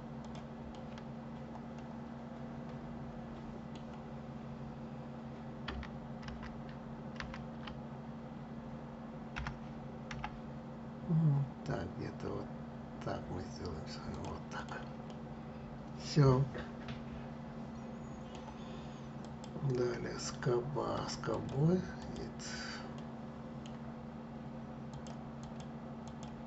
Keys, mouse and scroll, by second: 0.4-3.5 middle drag, 5.9 ctrl+z, 6.9 ctrl+z, 9.0 g, 14.3 click, 14.8-17.8 middle drag, 18.9 click, 21.0-22.6 drag, 22.6-24.6 middle drag, 24.6 click, 25.1 click, 25.7 click.